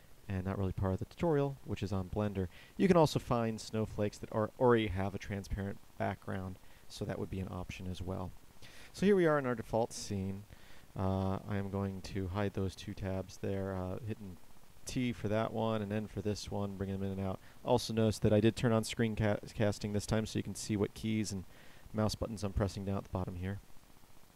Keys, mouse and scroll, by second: 10.9 t, 11.5 n, 14.5 t, 15.1 t, 15.5 n, 15.9 n.